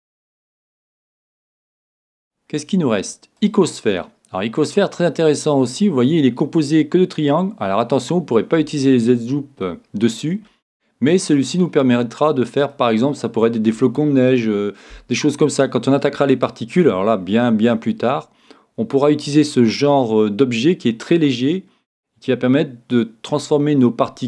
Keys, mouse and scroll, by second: 0.6 shift+a, 4.1 middle click, 4.7-5.7 scroll up 1, 5.7 scroll up 1, 5.9-7.5 middle drag, 9.1-12.7 middle drag, 13.1-15.0 scroll down 1, 15.0 scroll down 1, 15.2-24.2 middle drag.